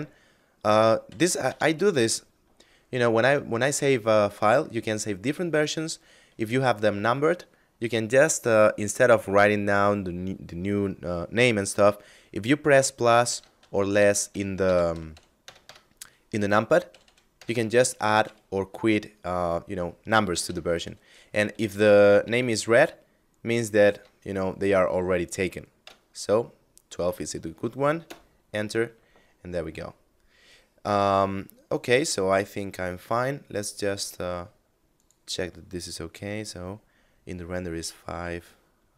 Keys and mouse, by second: 0.5 KP_Subtract, 0.9 KP_Add, 12.7 KP_Add, 12.8 KP_Subtract, 13.4 KP_Add, 13.7 KP_Subtract, 19.7 KP_Add, 27.3 Return, 32.3 right click, 34.3 click.